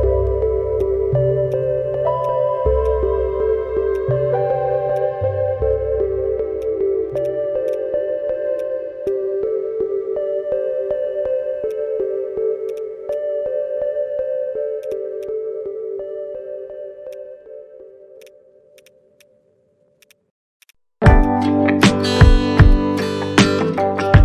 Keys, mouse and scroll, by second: 2.8 right click, 7.2 double click, 8.5 alt+click, 9.0 alt+click, 11.4 alt+scroll up 1, 12.8 double click, 13.1 alt+click, 14.9 double click, 15.2 alt+click, 16.2 alt+middle click, 16.5 alt+scroll down 1, 16.7 alt+middle click, 17.1 alt+click, 17.5 alt+scroll up 1, 18.2 double click, 19.1 double click, 19.2 alt+click, 20.1 double click, 20.9 alt+middle click, 22.2 scroll down 1, 22.7 alt+click, 24.0 right click.